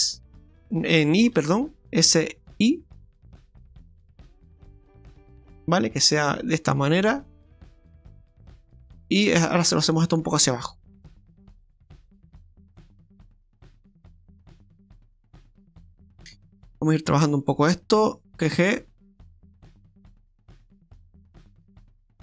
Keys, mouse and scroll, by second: 9.2 right click, 9.7 shift+right click, 10.7 click, 13.4 click, 13.7 scroll up 1, 14.9 middle click, 16.7 click, 17.4 right click, 18.3 g, 21.3 scroll down 2, 21.5 middle click.